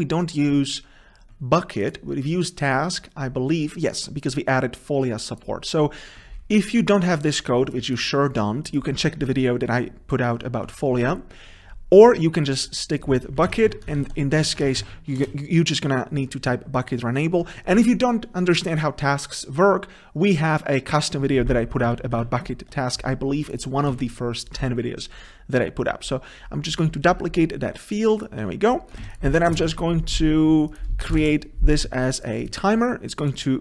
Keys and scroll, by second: 2.1 ctrl+b, 15.4 Return, 18.5 ctrl+shift+Left, 21.6 ctrl+z, 25.2 ctrl+c, 29.1 ctrl+c, 29.8 ctrl+v.